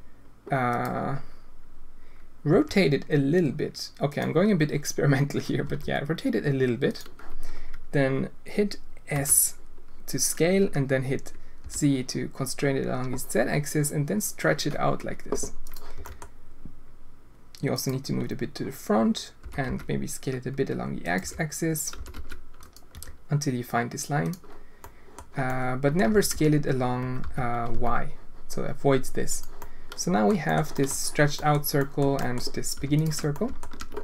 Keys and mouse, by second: 2.5 r, 5.6 r, 9.1 s, 15.9 g, 19.4 s, 21.2 g, 21.9 s, 22.6 g, 22.9 g, 24.9 click, 25.5 click, 29.7 click, 30.5 click, 30.8 click, 31.3 click, 31.8 click, 32.2 click, 32.9 alt+shift+click, 33.3 alt+shift+click.